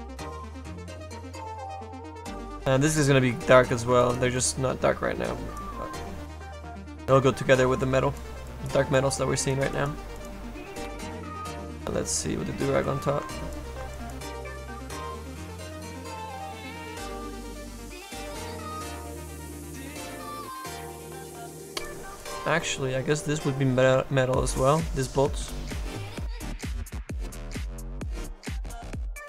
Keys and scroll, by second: 25.1 s.